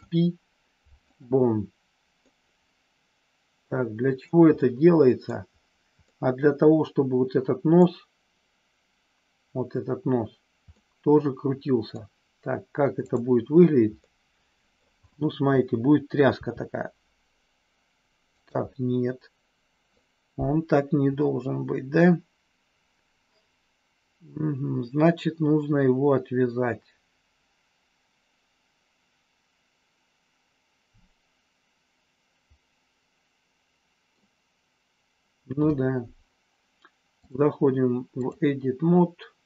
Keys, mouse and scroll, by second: 2.2-3.6 middle drag, 4.6 middle click, 6.0-7.9 middle drag, 10.6-11.9 middle drag, 13.0 click, 14.0 middle click, 16.2 r, 18.6-19.9 middle drag, 21.1-34.1 middle drag, 37.4 click.